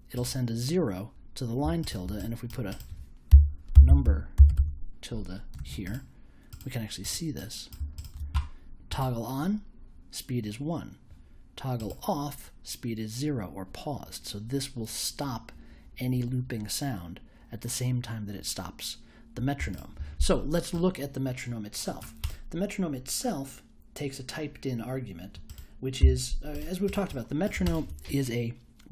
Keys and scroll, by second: 3.3-5.5 typing, 25.9 b.